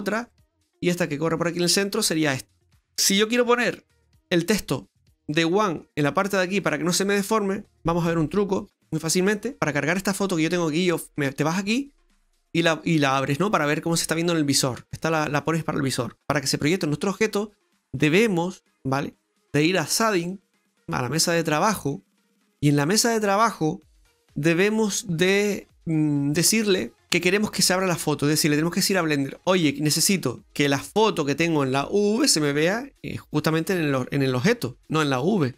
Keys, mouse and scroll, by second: 5.4 middle click, 20.4 click, 21.2 scroll down 1, 21.5 middle click, 23.0-24.2 scroll up 5.